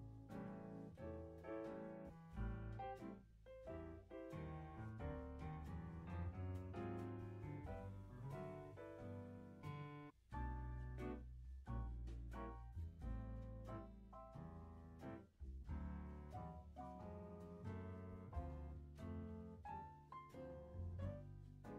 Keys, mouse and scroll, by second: 0.9 Delete, 1.6-2.1 drag, 2.1 space, 3.5 space, 3.8-5.5 drag, 5.5-6.3 scroll up 7, 5.8 middle click, 6.3 click, 6.7 click, 7.1 scroll down 2, 8.0 middle click, 9.4-11.6 middle drag, 11.6-14.2 scroll up 36, 12.1 middle click, 14.2 click, 15.2 click, 15.9 scroll up 5, 16.2 middle click, 16.6-17.5 scroll up 1, 17.5 click, 18.3-19.1 scroll up 9, 19.1 click, 19.8 click.